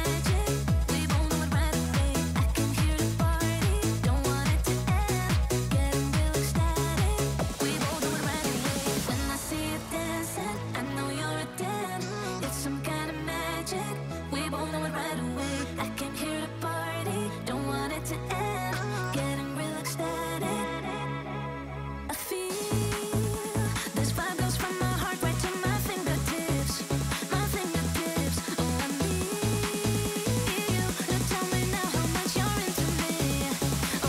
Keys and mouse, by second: 1.6 r, 2.7-7.6 drag, 13.2-13.8 middle drag, 14.5-16.6 drag, 16.9-18.5 drag, 18.7 click, 20.2-21.4 drag, 21.9 KP_0, 22.9-26.0 drag, 26.4 click, 28.6 click, 29.5 shift+middle click, 30.1 KP_1, 30.8 ctrl+s, 31.0 click, 31.1 shift+a, 33.0-33.9 typing.